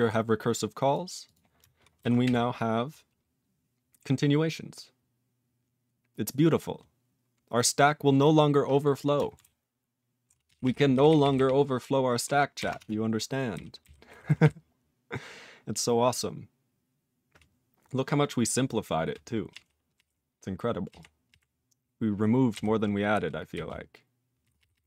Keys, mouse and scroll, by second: 0.0 click, 0.9 click, 1.2 click, 1.3 click, 1.8 click, 10.1 alt+z, 10.6 ctrl+p, 10.9 ctrl+n, 11.0 ctrl+n, 11.2 ctrl+n, 11.3-12.2 ctrl+n, 12.5 ctrl+n, 12.8 Tab, 13.5-14.4 typing, 19.5 p, 19.9 p, 20.8 p, 21.2 p, 22.5-24.8 typing.